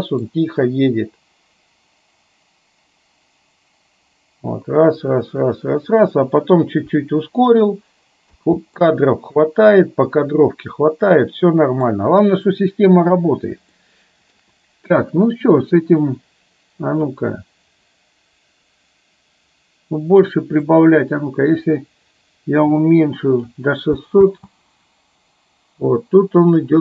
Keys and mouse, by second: 8.4 space, 8.9-11.9 middle drag, 13.9 shift+middle click, 17.1-20.4 drag, 20.9-23.6 drag, 24.4 space, 26.6-26.8 middle drag.